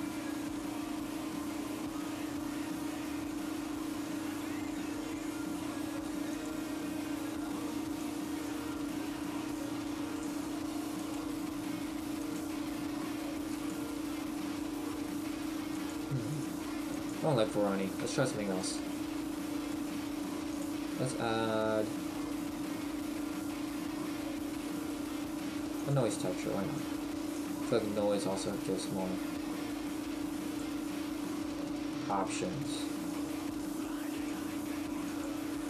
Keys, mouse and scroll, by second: 1.2-1.8 scroll up 2, 2.4-3.3 scroll up 4, 6.8 click, 12.5 click, 15.9 click, 17.3 click, 18.1 Delete, 18.8 click, 19.3 space, 19.9 right click, 20.5 click, 27.3 click, 28.9 click, 33.4 click, 35.3 click.